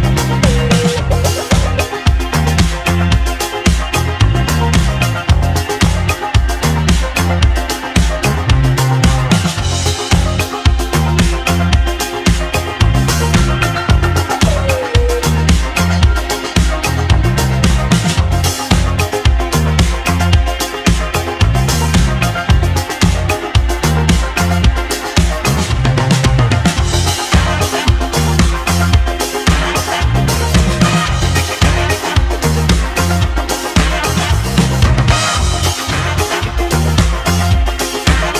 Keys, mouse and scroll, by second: 5.0 click, 7.8-12.1 drag, 8.5-9.4 shift+middle drag, 12.1-14.4 shift+middle drag, 14.4-19.1 drag, 19.1-20.1 middle drag, 20.1-21.4 scroll down 1, 22.9-24.2 scroll down 1, 24.2 scroll down 1, 24.3-25.2 middle drag, 25.2-32.7 drag, 25.2-26.0 scroll down 1, 26.0-28.2 shift+middle drag, 28.2-28.8 scroll down 1, 28.8-30.3 shift+middle drag, 30.3 ctrl+r, 31.1-31.5 scroll down 1, 31.5-32.7 right drag, 32.7 Tab.